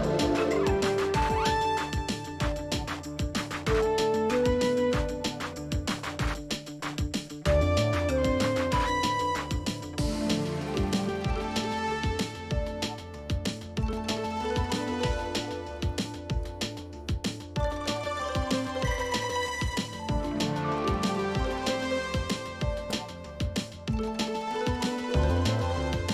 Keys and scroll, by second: 13.9-16.5 typing, 19.8-20.7 typing, 21.0 Return.